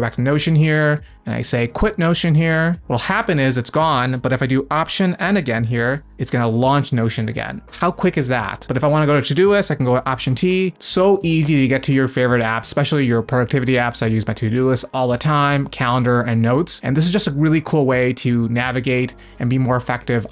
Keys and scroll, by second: 0.0 alt+n, 5.4 alt+n, 10.1 alt+t.